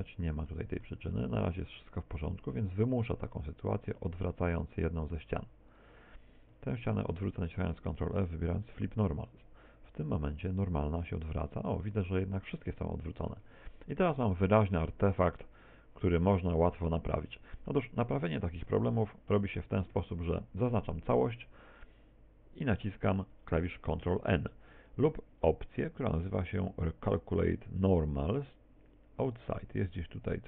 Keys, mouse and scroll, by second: 3.9 right click, 4.4 right click, 4.6 shift+right click, 5.3 shift+right click, 10.3 middle click, 11.1 middle click, 13.5 Tab, 13.8 middle click, 16.7 scroll down 2, 17.3 shift+middle click, 18.7 Tab, 19.4 a, 21.9 middle click, 26.2-29.6 scroll down 2, 29.6-30.4 scroll up 1.